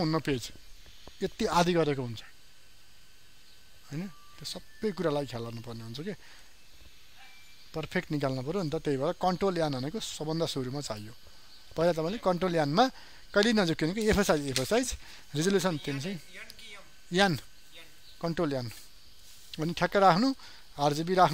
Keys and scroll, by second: 9.5 ctrl+n.